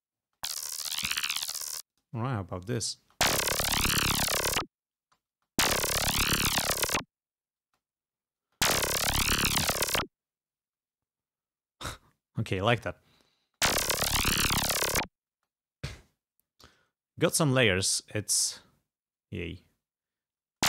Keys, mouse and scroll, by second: 0.4 space, 1.6 space, 2.1 click, 2.7 space, 2.9 click, 5.1 space, 7.7 space, 8.5 space, 10.7 space, 13.5 space, 15.4 space, 16.7 g, 17.1 scroll up 1, 17.7 scroll down 1, 18.6 scroll up 1, 19.0 scroll down 1, 20.0 scroll down 1, 20.5 space.